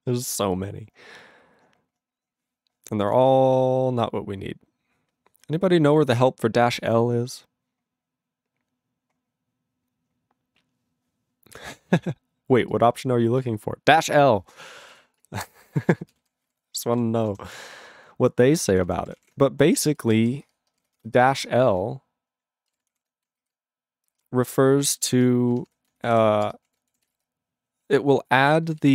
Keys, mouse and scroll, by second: 14.6 click, 14.9 click, 15.2 click, 15.9 ctrl+space, 16.4 ctrl+alt+b, 16.5 ctrl+g, 16.9 ctrl+s, 17.2 ctrl+a, 17.4 Return, 17.4 ctrl+n, 17.5-18.6 ctrl+n, 18.6 ctrl+e, 18.7 ctrl+n, 18.9 ctrl+n, 19.0 ctrl+a, 19.2 ctrl+o, 19.2 Tab, 19.7-28.9 typing, 23.5 ctrl+f.